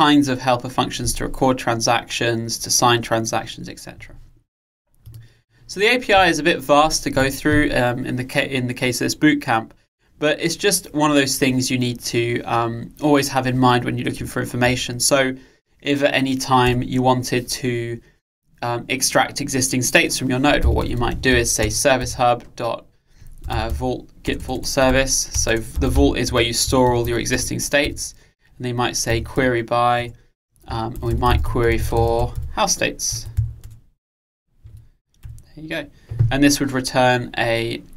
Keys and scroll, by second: 21.7 Return, 27.4 Return.